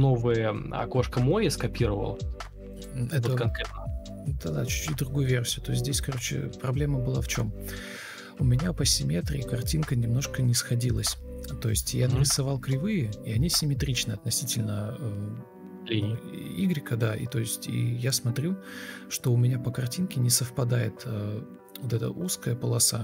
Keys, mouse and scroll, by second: 0.7 ctrl+x, 1.0 Delete, 1.1 ctrl+v, 1.4 ctrl+space, 2.4 ctrl+space, 2.4 Delete, 4.9 Escape, 5.6 shift+super+r, 7.6 ctrl+v, 7.6 space, 8.2 alt+space, 8.9-10.0 typing, 13.3 shift+r, 14.2 ctrl+x, 14.4 Delete, 14.8 ctrl+v, 15.8 Delete, 16.2 ctrl+c, 17.0 Escape, 17.4 Delete, 18.4 Escape, 18.7 Delete, 19.6 ctrl+space.